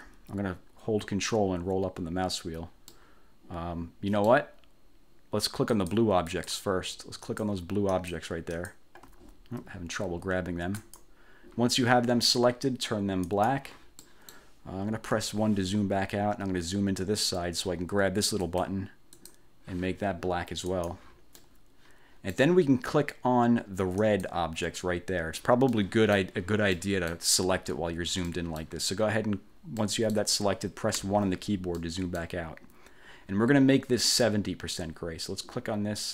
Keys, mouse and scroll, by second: 1.5-2.6 ctrl+scroll up 4, 3.0-4.6 ctrl+drag, 5.8 click, 6.4 click, 7.3 click, 8.0 click, 8.6 click, 9.4-9.7 ctrl+scroll up 2, 10.9 click, 13.4 click, 14.2 click, 15.3 1, 16.7-17.7 ctrl+scroll up 4, 18.6 click, 19.3 click, 20.9 click, 21.5-22.7 drag, 24.1 click, 25.9 click, 26.9 click, 28.4 click, 29.9 click, 31.1 1, 31.9 click.